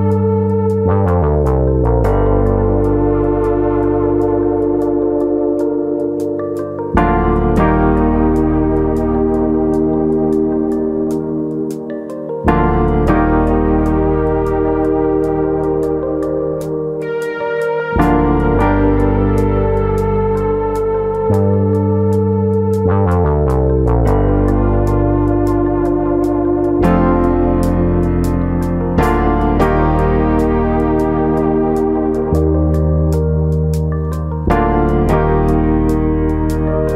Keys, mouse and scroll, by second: 0.0 middle click, 0.9 click, 1.6 ctrl+z, 1.7 middle click, 2.0 scroll up 2, 2.9 click, 3.8 middle click, 5.1 KP_3, 7.4 click, 8.3 click, 10.8 click, 11.8 click, 12.3 middle click, 13.0 middle click, 13.8 click, 14.5 middle click, 15.1 click, 15.7 middle click, 16.0 middle click, 16.6 click, 17.0 middle click, 17.5 click, 18.0 middle click, 18.6 ctrl+z, 18.8 middle click, 19.5 click, 20.1 middle click, 20.6-21.2 scroll up 2, 20.8 middle click, 21.5-22.0 scroll up 2, 21.7 middle click, 22.0-22.5 scroll down 1, 22.9 click, 23.5 middle click, 24.4 click, 25.2 middle click, 25.7-26.5 scroll down 3, 25.9 middle click, 26.5 middle click, 27.6 KP_1, 28.1-28.5 scroll down 2, 30.0 scroll up 2, 31.2-32.3 scroll down 1, 32.3 scroll down 3, 32.6 middle click.